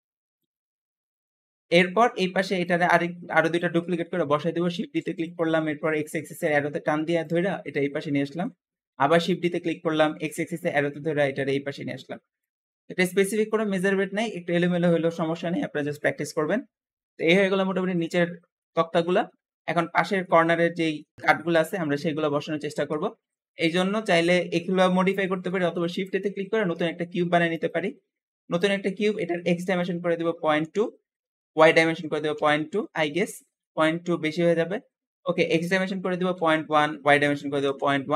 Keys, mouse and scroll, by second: 0.7-3.9 middle drag, 3.9-4.6 scroll up 2, 4.6 shift+d, 5.8 click, 7.3-7.7 scroll down 1, 7.7-8.9 middle drag, 8.9 shift+d, 10.4 click, 12.5-15.6 middle drag, 18.8-19.5 scroll down 2, 19.6 scroll down 2, 19.9 shift+middle click, 20.4-20.7 scroll down 3, 20.7-21.1 shift+middle drag, 21.1-22.9 scroll up 1, 22.9-23.4 scroll down 2, 23.4-23.8 shift+middle drag, 23.8-24.2 scroll up 2, 24.2-25.5 shift+middle drag, 25.5 shift+a, 27.9-28.3 scroll down 2, 28.4-29.5 scroll up 1, 29.5-32.7 drag, 33.1-33.5 scroll down 4, 33.5-34.5 shift+middle drag, 34.5-35.4 scroll up 4, 35.4-38.1 drag.